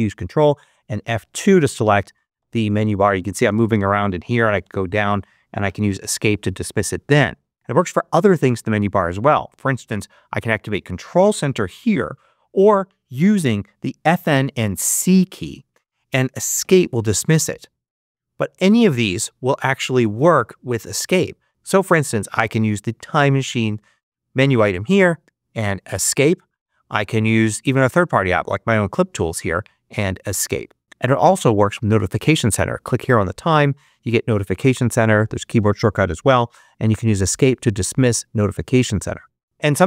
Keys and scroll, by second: 0.3 ctrl+F2, 1.7 Right, 14.6 c, 16.5 Escape, 25.9 Escape, 30.2 Escape, 36.7 Escape.